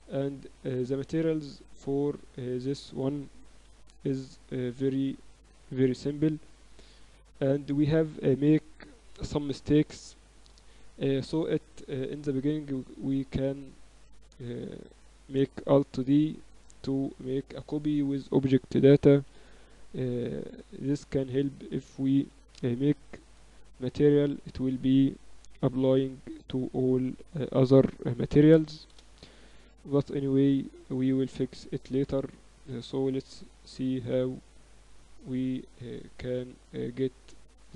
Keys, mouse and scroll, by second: 0.8 middle click, 3.4 shift+d, 5.4 x, 12.8-14.7 right drag, 15.7 alt+d, 16.6-17.8 drag, 17.8-18.8 middle drag, 19.2 g, 22.0 ctrl+Up, 23.9 middle click, 25.3 r, 32.1 click, 34.8 click, 35.5 z.